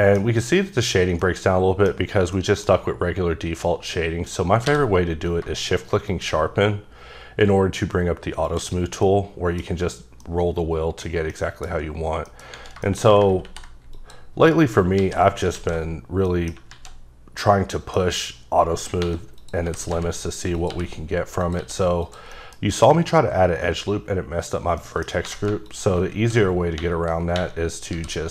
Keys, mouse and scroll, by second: 0.2 scroll up 3, 1.2 middle click, 2.0 scroll up 1, 2.4 middle click, 4.7 q, 6.1 shift+click, 7.0-7.7 scroll down 5, 7.7-8.5 scroll up 2, 8.5 click, 8.7 scroll down 3, 9.0 middle click, 9.6 scroll up 1, 10.1 scroll down 1, 10.2 middle click, 11.3 middle click, 12.3 middle click, 12.9 shift+middle click, 13.4 ctrl+r, 14.0 click, 14.4 right click, 15.0 ctrl+z, 16.3 middle click, 16.7 z, 17.4 middle click, 19.0-21.6 typing, 19.4 click, 20.6 click, 21.4 click, 22.0 click, 22.3 middle click, 22.6 scroll up 1, 24.8 middle click, 25.3 3, 25.7 alt+click, 26.2 w, 27.3 w, 27.9 w.